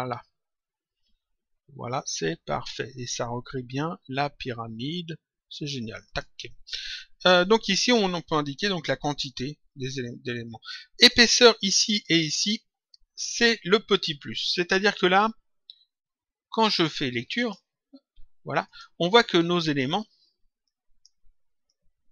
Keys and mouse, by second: 5.9 click, 8.2 click, 10.9 click, 14.6 click, 17.3 click, 18.6 click, 20.5 click.